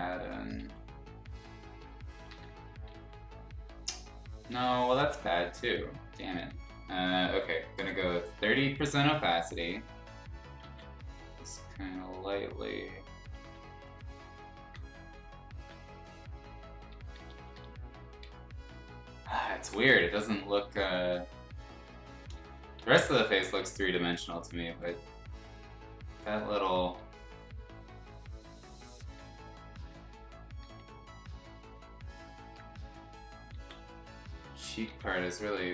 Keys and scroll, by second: 0.6 ctrl+z, 2.3 ctrl+z, 2.9 x, 4.5 x, 5.6 ctrl+z, 6.5 ctrl+z, 7.7 3, 10.6 ctrl+z, 13.3 x, 15.5 ctrl+z, 17.0 [, 17.2 [, 17.3 [, 17.5 [, 20.0 x, 20.7 ctrl+z, 22.4 ctrl+z, 22.8 x, 23.6 ctrl+z, 24.8 x, 26.9 x, 29.1 [, 29.3 [, 30.6 [, 33.5 ctrl+z, 34.6 ctrl+z, 34.8 x.